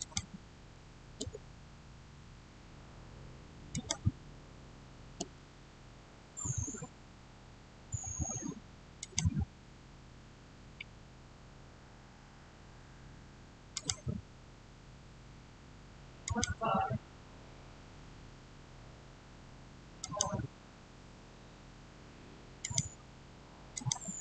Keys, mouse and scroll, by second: 1.1 Return, 3.6 click, 5.0 Return, 8.8 click, 13.6 click, 13.6 click, 16.1 click, 19.8 click, 19.9 click, 21.1 click, 22.5 click.